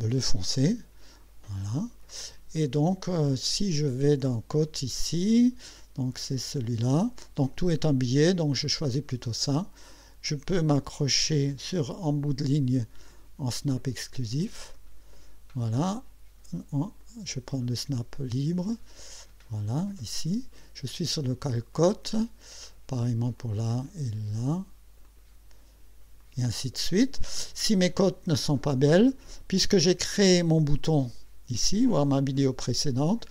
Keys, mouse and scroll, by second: 0.0 click, 1.5 click, 6.2 click, 8.6 click, 11.2 click, 13.9 click, 14.7 click, 17.0 click, 19.7 click, 23.4 click, 25.0 click, 26.2 click, 32.8 click.